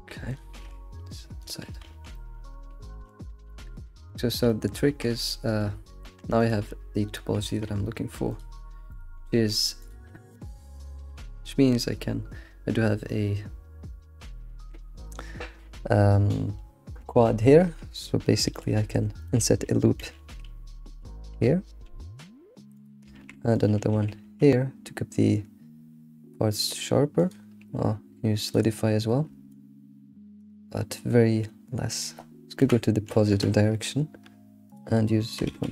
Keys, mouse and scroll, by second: 0.3 click, 0.5 alt+s, 1.8 ctrl+s, 2.1-3.4 middle drag, 3.7 Tab, 3.7 scroll down 2, 4.0 alt+q, 4.5-4.9 shift+middle drag, 4.9 Tab, 5.2-6.0 shift+middle drag, 6.0 Tab, 6.3 click, 6.9-7.3 scroll down 1, 7.3 g, 8.9 click, 9.1 g, 18.4 ctrl+r, 23.1 ctrl+r, 28.4 click, 29.5-30.5 shift+drag, 30.7-31.9 middle drag, 31.9-35.7 drag.